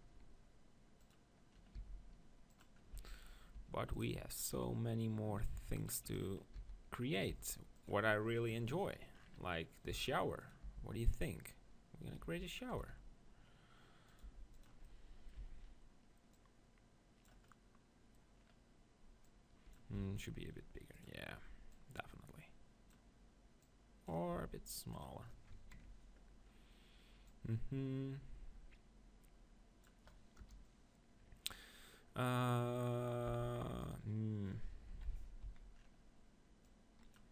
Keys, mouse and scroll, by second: 1.0-7.5 drag, 1.8 s, 2.9 z, 3.6 g, 6.5 s, 7.3 g, 7.5 middle click, 9.2 middle click, 10.1 s, 10.5-13.1 drag, 10.8 g, 12.2 g, 12.8 s, 14.2 g, 14.6 click, 15.4 z, 17.5 click, 18.8 click, 20.1 s, 23.8-25.7 drag, 24.3 s, 30.4 KP_0, 33.3 s, 33.9-35.1 drag, 34.9 KP_3, 35.4 click, 35.4 z, 35.9 middle click, 36.7-37.3 drag.